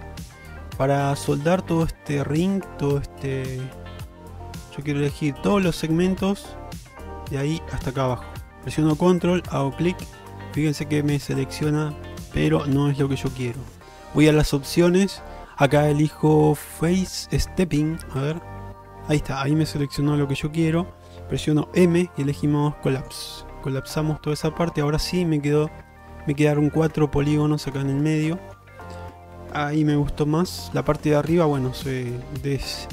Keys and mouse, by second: 4.5 shift+middle click, 18.3 click, 21.9 m, 23.8-24.8 middle drag, 26.1 middle click, 28.0 middle click, 30.2 1, 31.1 middle click, 31.5 middle click.